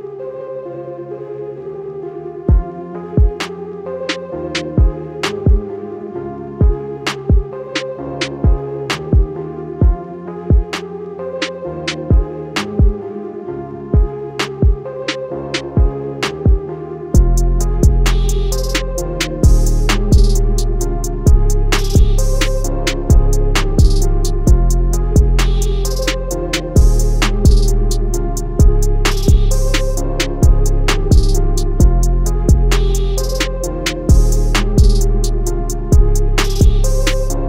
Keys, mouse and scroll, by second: 0.3 click, 6.4 shift+click, 7.2 shift+click, 8.4 click, 9.0 alt+click, 9.5 click, 10.8 alt+click, 11.3 alt+click, 11.9 alt+click, 12.4 click, 14.1 alt+scroll down 1, 14.6 alt+scroll up 1, 15.7 alt+scroll down 1, 19.5 scroll down 1, 19.6 scroll up 1, 19.7-20.2 scroll down 1, 20.2 click, 22.5 alt+scroll up 1, 23.2 click, 24.4 i, 24.6 click, 24.7 a, 25.8 i, 26.0 click, 26.5 a, 27.0 click, 29.1 click, 33.4 click.